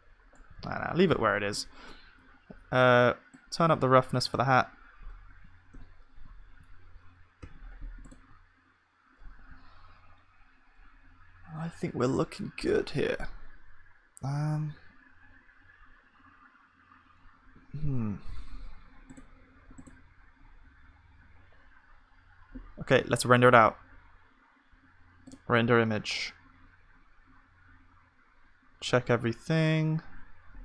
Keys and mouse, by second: 0.6 ctrl+z, 5.8 KP_0, 7.4 ctrl+s, 8.3-10.8 drag.